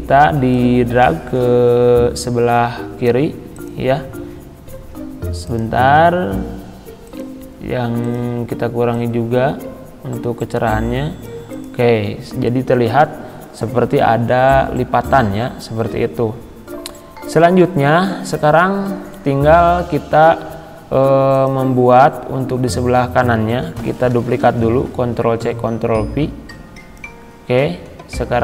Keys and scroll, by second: 24.1 ctrl+c.